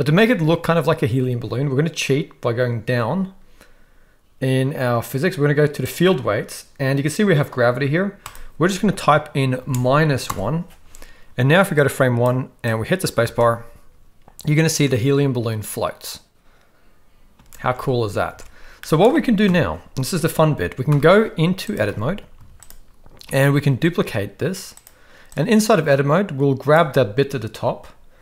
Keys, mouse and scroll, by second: 5.8 click, 8.3-10.3 drag, 11.7-12.2 drag, 12.8 click, 13.3 space, 17.4 space, 18.4 alt+a, 18.8 middle click, 19.4 KP_1, 20.9 shift+Left, 21.9 Tab, 22.3 z, 23.5 shift+d, 25.3-26.7 drag.